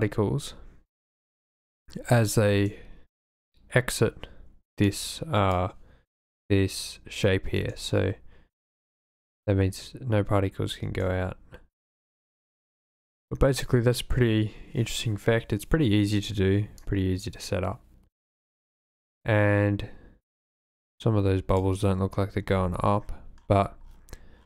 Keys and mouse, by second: 2.5 space, 4.9-5.6 drag, 7.6 space, 10.9 space, 12.0 click, 12.7 space, 16.8-21.6 drag.